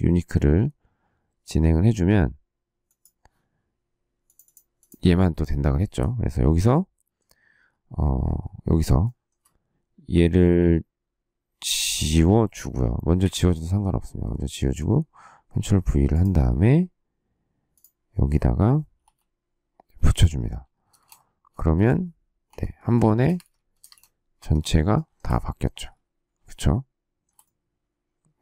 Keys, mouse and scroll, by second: 8.9 shift+middle click, 13.1 Delete, 14.4 ctrl+v, 18.9 k, 20.8 space, 20.9 Escape, 22.4 k, 23.1 space, 23.3 Escape, 23.7 space, 23.8 Escape, 24.3 Escape, 24.8 shift+middle click.